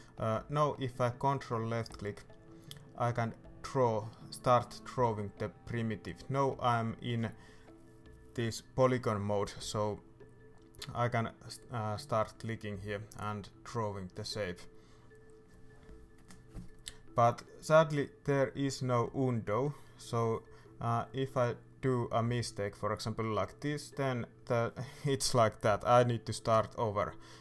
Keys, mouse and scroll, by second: 0.3 shift+middle click, 0.5-0.8 scroll up 2, 0.8 shift+middle click, 1.2-1.6 scroll up 2, 1.6-3.3 shift+middle drag, 3.3-7.4 ctrl+drag, 17.2-24.7 drag, 24.7 ctrl+z, 25.7 right click, 26.0-26.9 scroll down 1, 26.9 click.